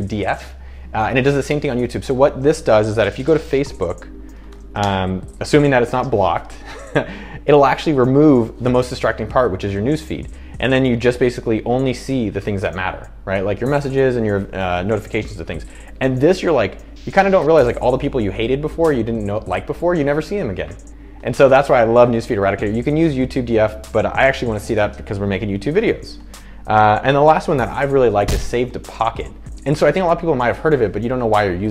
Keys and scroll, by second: 3.5 super+t, 4.2-5.2 typing.